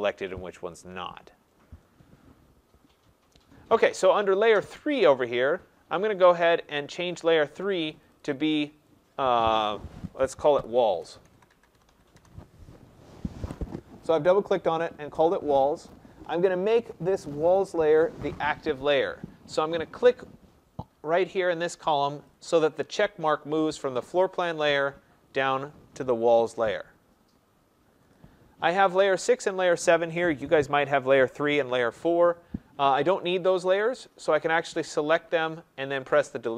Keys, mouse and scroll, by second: 4.4 click, 8.1 click, 8.3 click, 9.2 click, 10.5-12.1 typing, 22.2-27.3 drag, 28.1 click, 29.0 click, 30.2 click, 33.2 click.